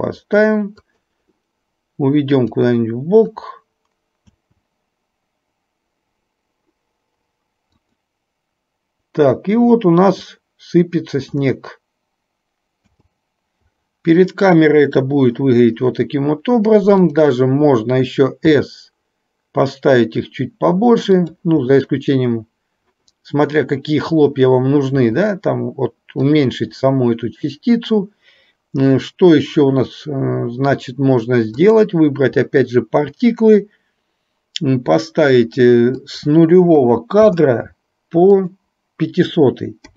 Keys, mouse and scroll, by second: 2.5-4.5 drag, 4.5 space, 8.0 click, 13.0 space, 17.0 click, 18.6 s, 36.1-37.5 drag, 38.4-39.9 drag.